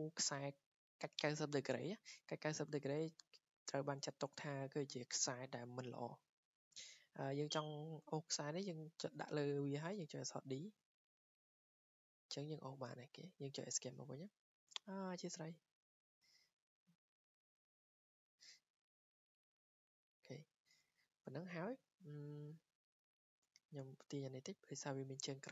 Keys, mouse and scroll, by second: 2.0 scroll, 2.3 scroll down 5, 3.6 click, 4.3-7.2 drag, 4.3 scroll, 9.9 d, 12.4 click, 13.1 Escape, 14.7 click, 15.4 d, 17.7 click, 18.1 click, 19.4 Escape, 20.8 Escape, 23.2 d, 24.4 click.